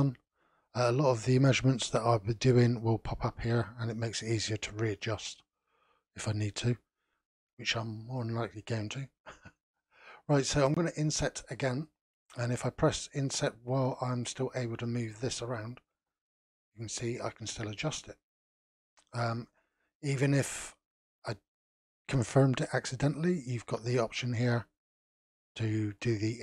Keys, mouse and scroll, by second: 24.4 click, 25.0 click, 25.4 click, 25.9 click, 26.3 click.